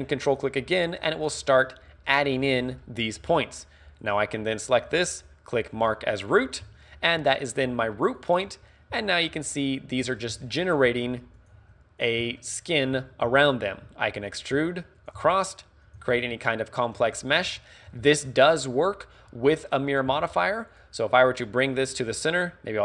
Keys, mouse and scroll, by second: 0.3 ctrl+click, 2.1 middle click, 2.8 middle click, 3.3 a, 4.0 right click, 5.9 click, 6.7-9.0 typing, 7.5 right click, 8.4 right click, 9.1 right click, 9.6 right click, 10.5 shift+middle click, 10.9-16.0 typing, 11.5 click, 12.1 click, 12.4 middle click, 14.4 click, 15.0 right click, 16.0 click, 16.3 shift+middle click, 16.5 middle click, 17.2 shift+middle click, 17.6 middle click, 18.1 shift+middle click, 19.3-19.7 scroll down 3, 20.1 z, 20.7 right click, 22.7 click.